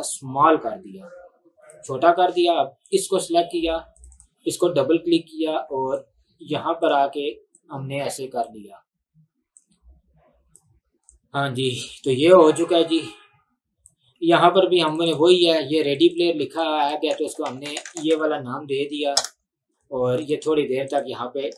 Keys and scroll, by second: 16.9-18.3 typing, 19.2 Return.